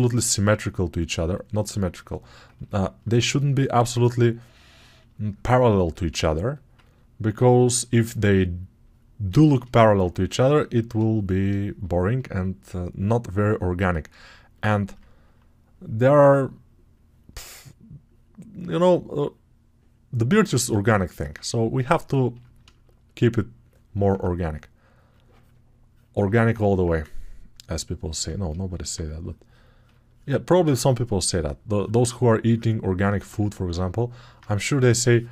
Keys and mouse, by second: 6.2 alt+right click, 6.5-13.4 ctrl+alt+drag, 13.4 right click, 21.2-25.0 ctrl+right drag, 25.0-26.7 drag, 26.7-33.8 ctrl+right drag, 33.8 alt+shift+click, 34.0-35.3 ctrl+right drag.